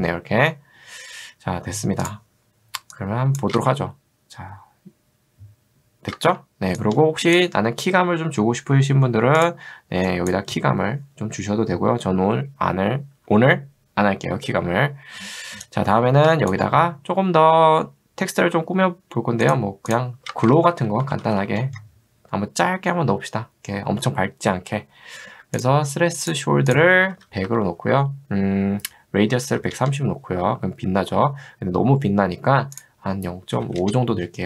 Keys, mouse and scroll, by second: 2.1 click, 3.1 click, 3.6 space, 6.3 space, 6.8 shift+click, 10.1 click, 15.8 click, 19.5 click, 19.9 click, 20.3 ctrl+space, 20.5-21.9 typing, 26.3 click, 26.9-27.8 typing, 29.1-30.1 typing, 32.8 click, 33.4-34.2 typing.